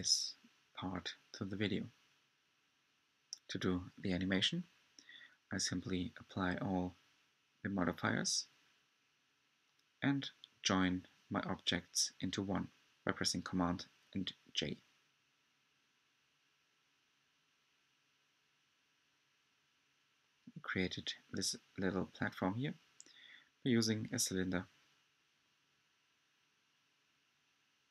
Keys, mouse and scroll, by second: 0.5 click, 2.3 click, 3.8 shift+click, 4.4 shift+click, 6.5 j, 8.4 click, 11.4 ctrl+a, 14.4 click.